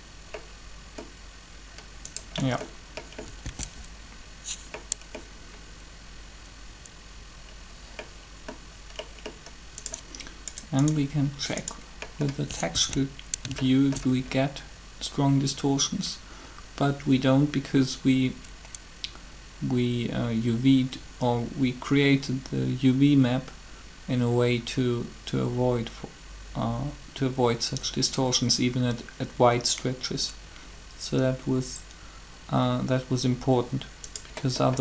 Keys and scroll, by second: 3.4 alt+a, 12.7 alt+a.